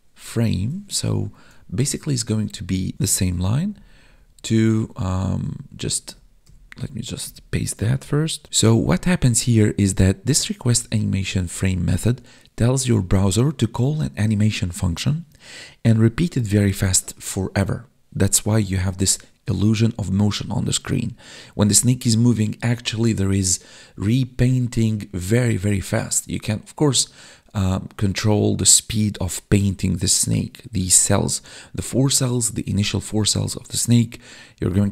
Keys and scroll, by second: 0.8 Tab, 1.3 Up, 2.9 ctrl+c, 3.7 Down, 4.8 Left, 5.3 Down, 5.8 ctrl+shift+Right, 6.3 ctrl+shift+Left, 7.1 ctrl+shift+Right, 8.0 ctrl+v, 8.4 ctrl+s, 8.4 Left, 9.1 ctrl+Left, 10.2 ctrl+shift+Right.